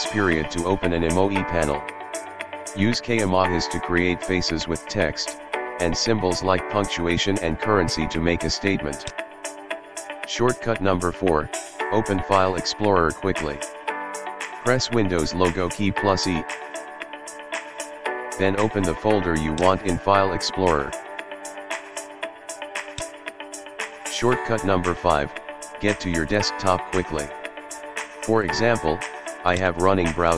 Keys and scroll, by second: 15.7 super+e.